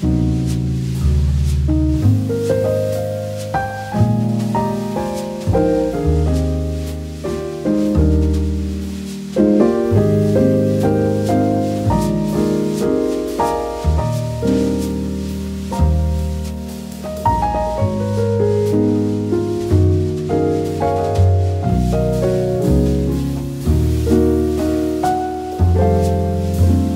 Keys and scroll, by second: 4.4 v, 7.4 k, 10.0 shift+x, 11.1 v, 14.6 a, 18.8 v, 24.3 v.